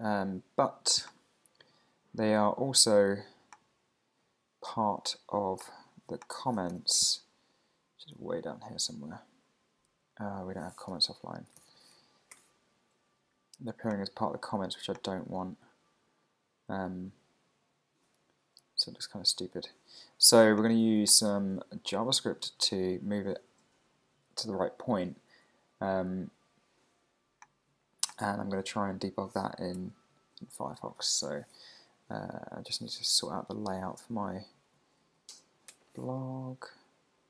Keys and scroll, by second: 6.7 alt+super+i, 7.9 super+Down, 11.1 super+t, 11.9 Right, 12.3 Return, 15.1 super+Down, 21.5 super+Up, 31.3 super+t, 34.5 Down, 35.7 Return.